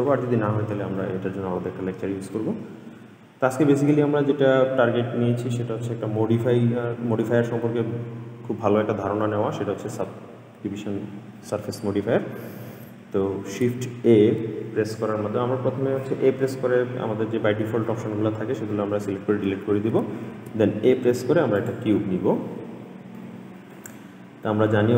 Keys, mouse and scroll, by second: 0.3 scroll down 2, 0.6-1.9 middle drag, 2.9 scroll up 1, 3.1-3.6 middle drag, 3.6-5.0 scroll down 1, 5.2-5.6 shift+middle drag, 5.6-6.0 scroll up 1, 6.0-7.4 middle drag, 8.0 ctrl+s, 10.3-11.7 middle drag, 12.7 ctrl+s, 13.9 shift+a, 20.5 shift+a, 23.3-24.9 middle drag.